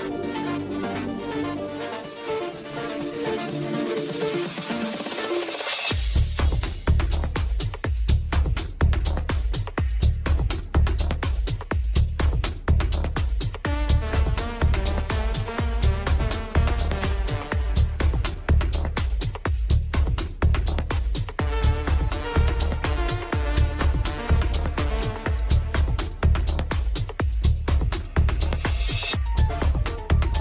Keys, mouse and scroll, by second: 5.4 click, 6.6-18.8 middle drag, 20.0 click, 24.9 click, 25.7-27.3 drag.